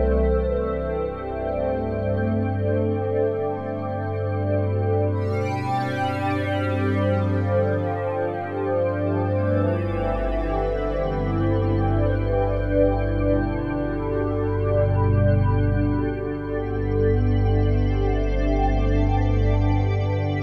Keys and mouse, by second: 0.0 click, 3.5 click, 4.0 click, 4.9 click, 6.1 click, 7.6 alt+click, 8.7 click, 12.6 click, 14.4-14.8 drag, 15.2-16.0 drag, 16.0 space, 17.7 space, 19.1-20.4 drag.